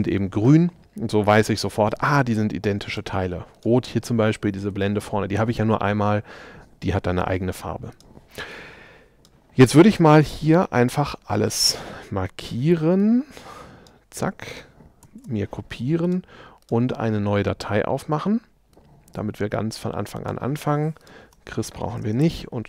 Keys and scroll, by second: 21.3 BackSpace.